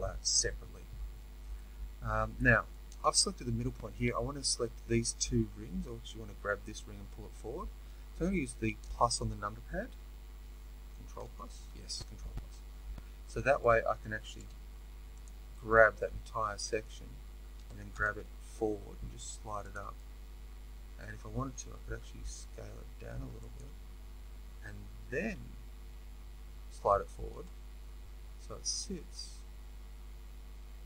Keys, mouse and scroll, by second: 3.5-22.4 middle drag, 8.8 KP_Add, 11.1 ctrl+KP_Add, 15.2 z, 17.6 g, 22.4 s, 25.0 g.